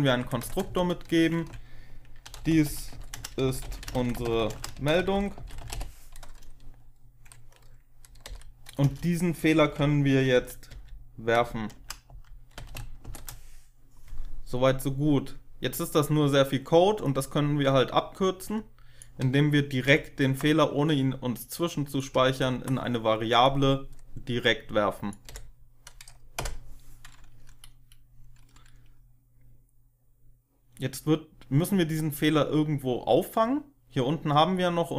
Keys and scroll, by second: 0.0-0.6 typing, 1.9-6.1 typing, 8.2 End, 8.7 Return, 9.3-12.9 typing, 19.8 ctrl+x, 22.2 ctrl+v, 25.2 Delete, 26.3 Delete, 29.2 BackSpace.